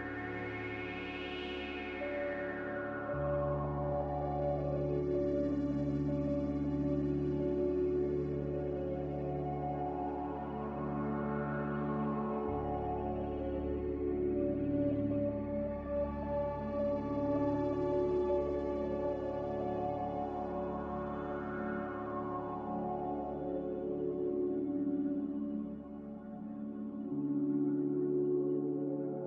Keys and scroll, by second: 12.4 m, 25.3 z, 26.3 Delete, 28.5 b.